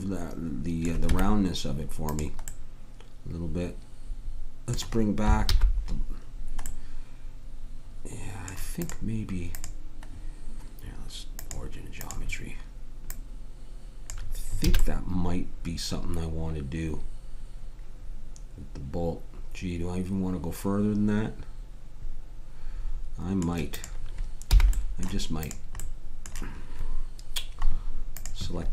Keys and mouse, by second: 1.1 Tab, 2.7 click, 5.4 alt+h, 14.6 a, 22.8-27.7 drag, 24.5 h, 28.1 right click.